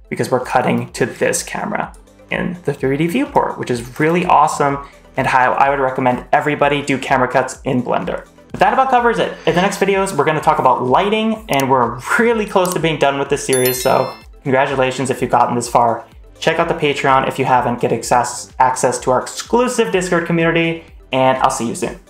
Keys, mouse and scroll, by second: 0.3 click, 1.0-1.8 drag, 3.2-3.6 drag, 3.8 space, 6.6 space.